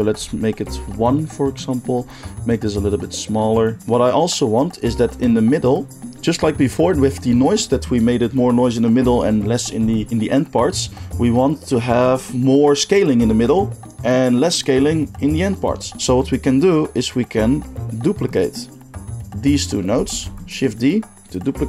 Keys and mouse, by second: 0.7-2.5 middle drag, 2.5-21.4 shift+drag, 20.1 shift+d, 21.4-21.6 middle drag.